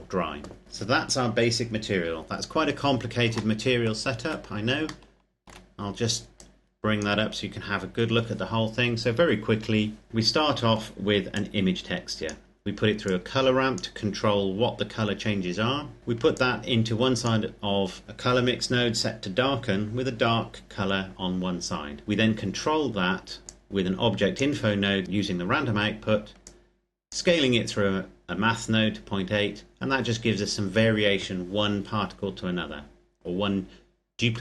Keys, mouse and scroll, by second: 0.6 click, 2.1-2.6 scroll down 1, 2.6-3.0 scroll up 1, 3.2 shift+middle click, 4.8 shift+middle click, 6.1 click, 7.0-7.8 scroll up 1, 7.8-9.7 scroll down 1, 11.1 click, 16.1 click, 23.0-23.4 scroll up 1, 23.4 click, 26.1 click.